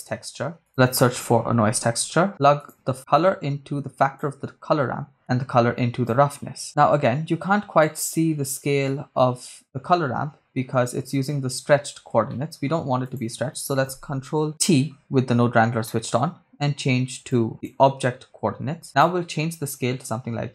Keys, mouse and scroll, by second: 0.7 shift+a, 3.1-4.3 drag, 5.2-6.4 drag, 6.6 middle click, 6.6-7.1 scroll up 2, 7.8-11.2 drag, 12.3 middle click, 13.1 click, 14.7 ctrl+t, 15.9 middle click, 17.3 click, 18.9-20.5 drag.